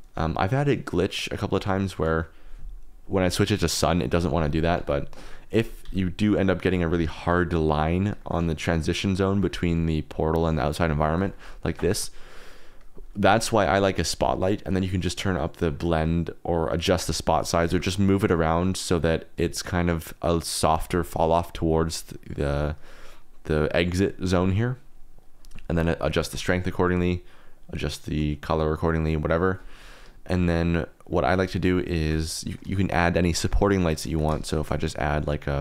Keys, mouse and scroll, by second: 1.9 middle drag, 4.4 ctrl+z, 4.7 ctrl+z, 5.5 r, 5.8 g, 6.5 click, 7.1 shift+click, 8.2 shift+click, 10.4 click, 11.3 shift+click, 14.5 click, 16.1 click, 17.2 click, 17.2 middle click, 17.6 g, 20.7 shift+click, 25.3-26.4 drag, 27.4 click, 31.3 shift+middle click, 31.5 middle click, 32.4 middle click, 33.4 shift+click, 33.8 shift+click, 34.4 shift+click, 34.5 shift+a.